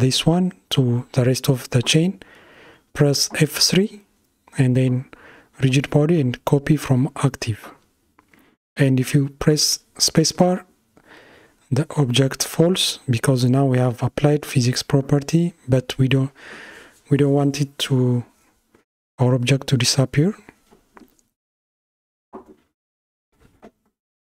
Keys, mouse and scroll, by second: 5.2 click, 6.8 space, 10.2 space, 11.5 Left, 13.2 shift+Left, 18.2 click, 20.5 g.